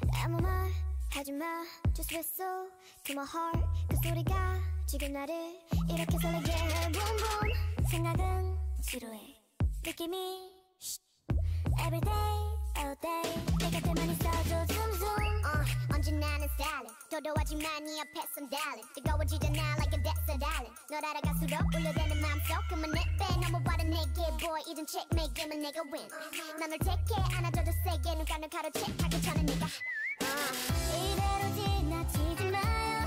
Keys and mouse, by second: 2.5 l, 2.9 r, 3.2 click, 3.2 right click, 4.4 g, 5.3 click, 5.7-8.9 typing, 10.5 r, 11.7 g, 13.9-17.0 typing, 20.5 a, 21.8-24.0 drag, 25.5 ctrl+e, 26.7 a, 27.0 a, 27.3 u, 29.4 l, 29.9 l, 30.6 g, 31.6 r.